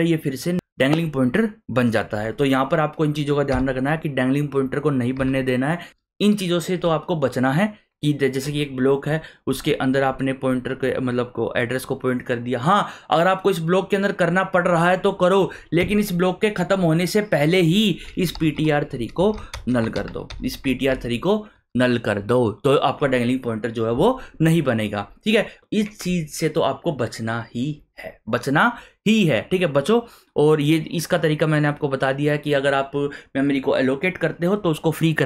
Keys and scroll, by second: 3.5 Return, 5.2 Return, 15.8 Return, 18.2-20.8 typing.